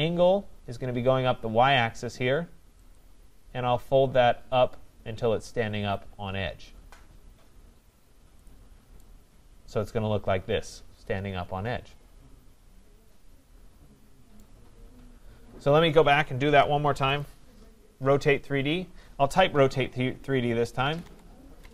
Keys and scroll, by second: 16.4 ctrl+z, 21.6 BackSpace.